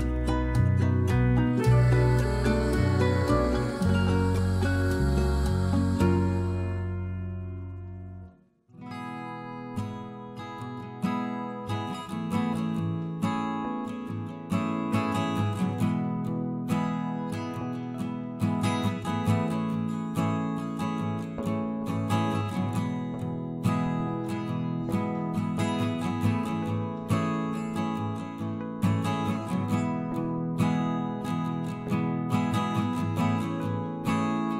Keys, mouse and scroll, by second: 0.7 middle click, 18.7-19.4 drag, 25.0-29.4 middle drag, 29.8-34.1 right drag, 34.1-34.5 ctrl+KP_Add.